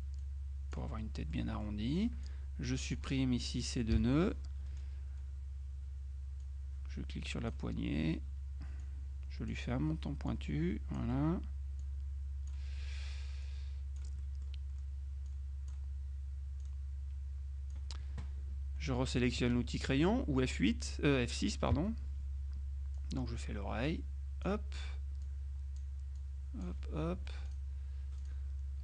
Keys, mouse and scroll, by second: 0.3 click, 1.1 middle click, 1.6 middle click, 1.9 click, 2.3 click, 4.0 Delete, 6.5-8.1 drag, 8.9 click, 10.4 click, 11.9 click, 13.5-15.0 drag, 14.6 right click, 15.4 click, 16.7-18.3 drag, 21.8 F6, 23.0-25.0 drag, 25.3 click, 27.2 F2, 27.5 click, 28.3 click.